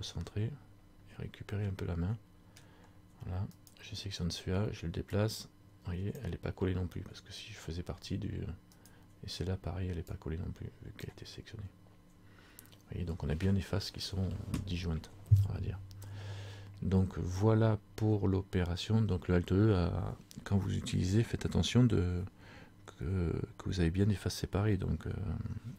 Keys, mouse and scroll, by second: 0.5-1.2 scroll down 4, 1.7 middle click, 2.8 scroll down 1, 3.8 right click, 5.3 click, 9.0 right click, 10.2 click, 11.9 scroll down 1, 12.4-13.2 scroll down 1.